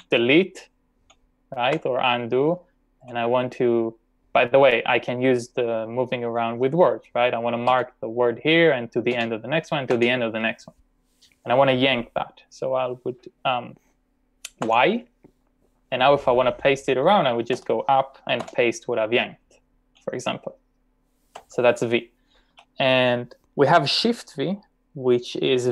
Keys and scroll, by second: 0.0 d, 1.7 u, 3.0 v, 7.7 e, 9.1 e, 9.9 e, 14.7 y, 17.6 k, 18.4 p, 21.4 u, 22.5 j.